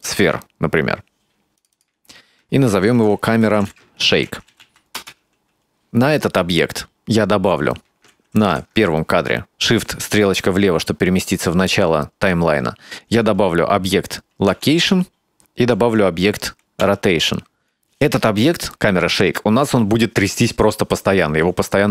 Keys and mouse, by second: 1.6 click, 1.7-5.5 drag, 8.5 shift+Left, 14.6 i, 16.9 i.